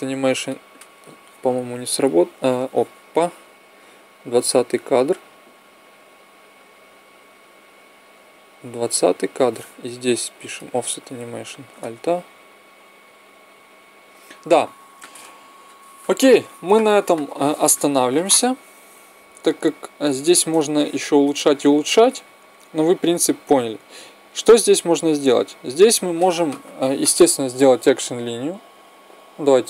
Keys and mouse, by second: 0.0 Escape, 0.0-1.9 drag, 3.5-5.9 drag, 9.9-11.7 drag, 11.5 alt+a, 16.1 Escape, 17.5-19.2 drag, 20.0-21.5 middle drag, 22.8 middle click, 23.5-24.8 drag.